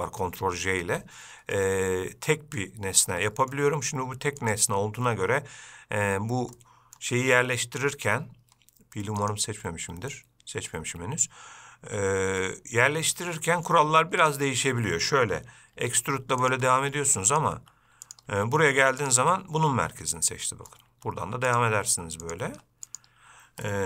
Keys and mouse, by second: 2.0-2.9 middle drag, 3.6 middle click, 6.3 Tab, 6.9 middle click, 9.6-11.1 drag, 13.7 middle click, 14.5 click, 16.1 e, 16.9 e, 19.6-21.0 middle drag, 21.2 e, 22.0 e.